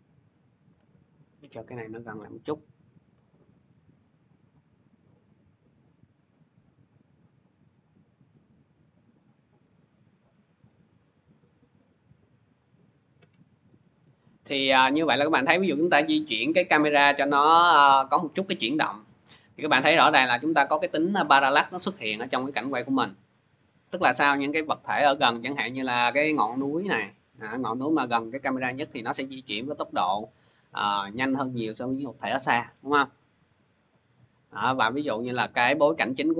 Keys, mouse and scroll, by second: 1.8 shift+click, 5.9 shift+click, 12.0 click, 12.4 click, 12.8 scroll, 17.4-17.8 scroll, 35.7 click.